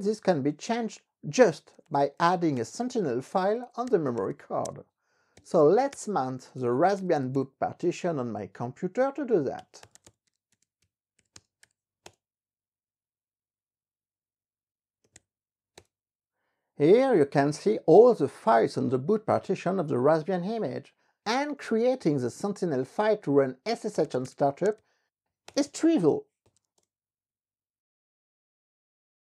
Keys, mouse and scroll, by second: 1.7-8.4 typing, 8.7 Return, 9.5-12.3 typing, 15.0-15.8 typing, 15.9 Return, 23.7-27.3 typing, 25.7 Return.